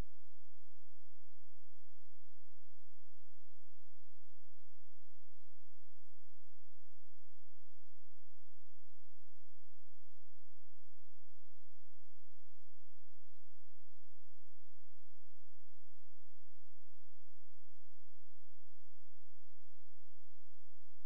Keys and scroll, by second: 1.3 ctrl+z, 6.6 space.